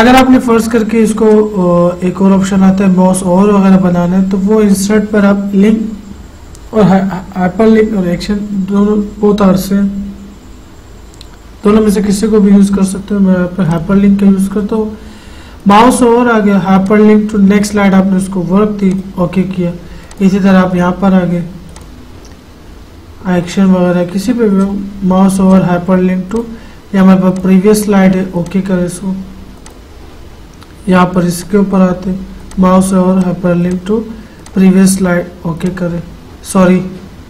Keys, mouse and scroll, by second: 0.9-4.9 drag, 4.9 click, 13.9 click, 19.0 click.